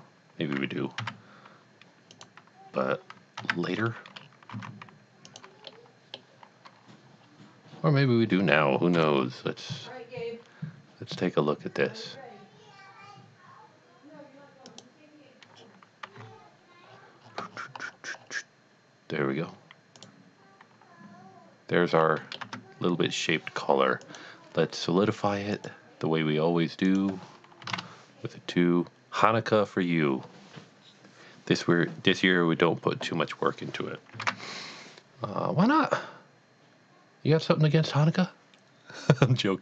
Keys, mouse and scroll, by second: 1.0 1, 2.1 click, 3.4 1, 4.2 scroll up 1, 4.6 alt+a, 5.3 click, 5.7 middle click, 7.2 scroll down 1, 9.0 KP_1, 14.7 click, 16.0 g, 16.2 z, 17.0-19.0 scroll down 5, 20.0 click, 21.9 middle click, 22.6 Tab, 24.0 click, 25.6 click, 26.8 click, 27.6 KP_2, 27.7 KP_Enter, 35.1 a.